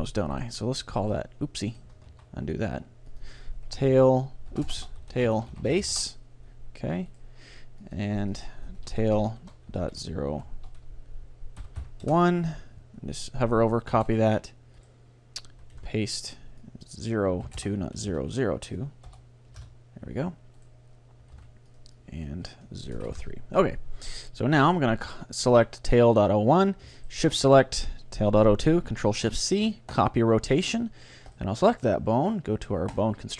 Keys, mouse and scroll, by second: 2.1 ctrl+z, 3.1-4.9 drag, 3.1 right click, 4.7 BackSpace, 4.9 BackSpace, 7.1 right click, 7.9 click, 10.5 BackSpace, 13.9 ctrl+c, 14.9-16.5 right drag, 15.8 ctrl+v, 16.3-18.1 drag, 20.6-22.3 right drag, 21.3 ctrl+v, 21.7-23.4 drag, 24.7-26.7 right drag, 27.0-28.5 right drag, 28.5 middle click, 29.1 ctrl+shift+c, 31.3-33.1 middle drag, 32.9-33.3 drag.